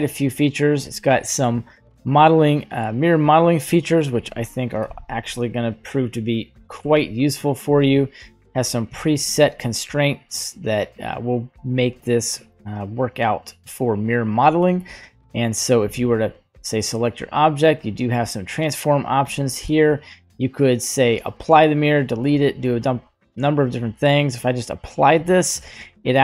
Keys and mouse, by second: 2.6 click, 3.8 middle click, 4.1 right click, 4.2 click, 4.8 Delete, 6.0 right click, 6.8 g, 8.0 middle click, 9.0 shift+middle click, 9.5 g, 12.1 middle drag, 16.4 right click, 17.9 click.